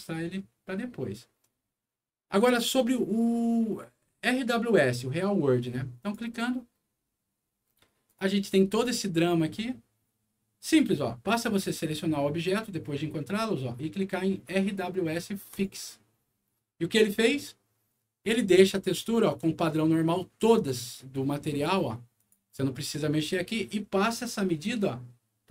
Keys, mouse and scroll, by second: 1.2 scroll down 2, 2.3 click, 3.2 scroll up 2, 6.0 click, 7.6 scroll up 2, 8.0 click, 11.2 middle click, 11.7 scroll up 1, 15.4 click, 17.9 middle click, 18.7 click, 20.3 click, 22.1 click.